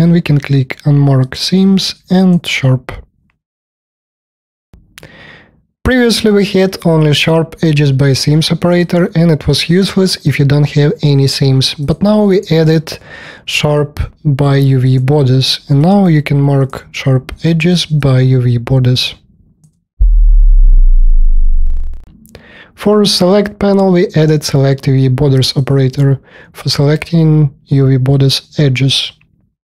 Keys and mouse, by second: 5.1-17.9 drag, 8.7-16.6 right drag, 17.9 alt+middle click, 18.0 alt+click, 18.0 alt+right click, 18.1 alt+middle click, 18.8 alt+click, 18.8 alt+right click, 18.9 alt+middle click, 25.5 middle click, 25.6-27.1 drag, 27.1-29.7 alt+middle drag.